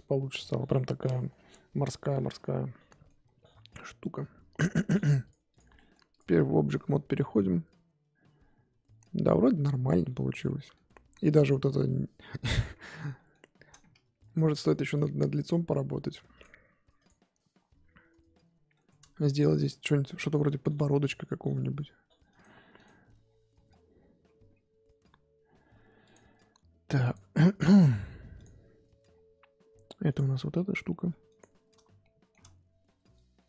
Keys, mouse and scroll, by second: 1.3-5.3 middle drag, 5.3 click, 5.7-6.1 middle drag, 6.1 click, 6.3 scroll down 1, 6.5-10.1 middle drag, 10.1-10.4 scroll up 1, 10.4-10.9 middle drag, 10.9-11.8 scroll up 2, 12.2-13.1 scroll up 3, 13.1-14.6 middle drag, 14.6 click, 17.0-18.7 drag, 18.7-28.4 shift+middle drag, 28.4-30.1 drag, 30.5 middle click, 31.0 f, 31.5-32.0 scroll up 2, 32.0 shift+middle click, 32.4-33.1 scroll down 1, 33.1-33.4 drag.